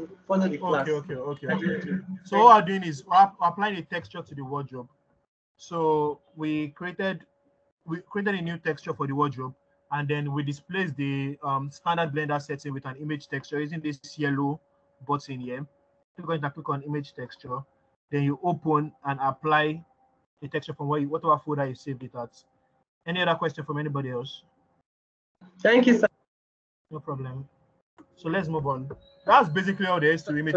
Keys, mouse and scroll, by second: 2.3 scroll up 3, 15.8-19.1 drag, 20.1-21.5 scroll down 1, 21.5-22.4 scroll up 1, 22.4-25.9 middle drag, 22.4-23.1 scroll down 1, 29.6 middle click, 29.6-30.5 scroll up 1.